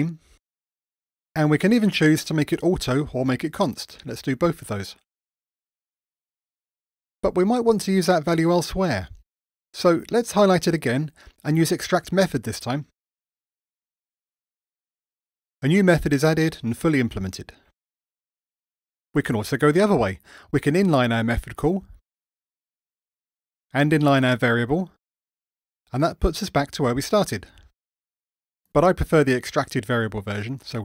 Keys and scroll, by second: 10.3 alt+Up, 21.0 alt+super+n, 25.1 alt+super+n, 30.4 super+z.